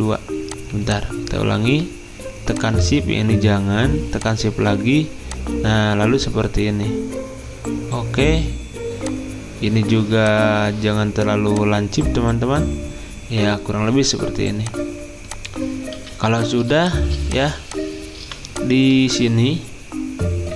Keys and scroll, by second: 18.8-19.5 typing.